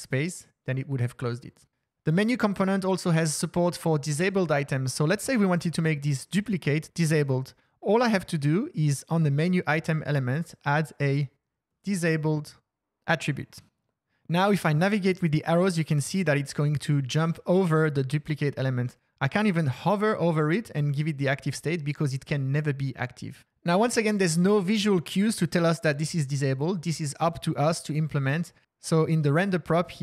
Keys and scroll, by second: 4.4 Down, 4.5 Down, 5.0 Up, 15.1 Down, 15.8 Up, 15.9 Down, 16.1 Down, 16.3 Down.